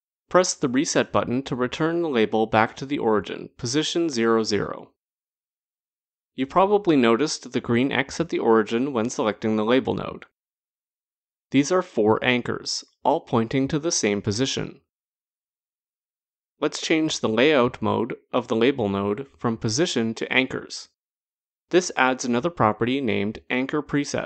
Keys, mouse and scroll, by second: 4.0 click, 17.5 click, 20.2 click.